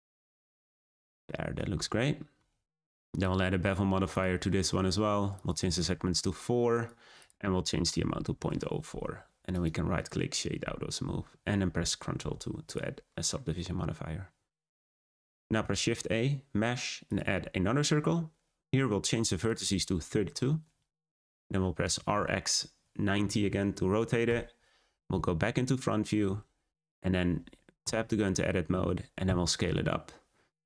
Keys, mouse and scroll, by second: 0.6 click, 1.2 middle click, 1.7 Tab, 2.2 scroll up 1, 4.1 click, 4.5-4.8 scroll up 1, 5.3-6.8 drag, 7.1-9.5 drag, 9.5-10.7 right drag, 10.7-12.1 scroll down 2, 12.1 ctrl+2, 12.6 click, 13.0-13.3 scroll down 2, 13.3-15.5 middle drag, 15.5 shift+a, 19.3-21.8 drag, 21.8 r, 26.7-27.8 scroll up 2, 27.8 Tab, 29.2 s.